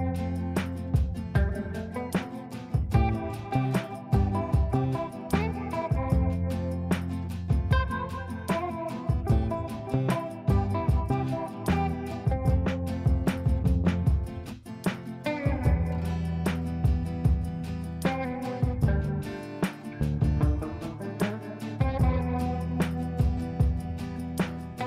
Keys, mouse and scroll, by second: 0.8 ctrl+space, 1.4 click, 2.3 right click, 3.0 click, 3.9 ctrl+a, 6.2-13.6 typing, 14.8-16.9 typing, 20.1-21.6 typing, 23.7 ctrl+space.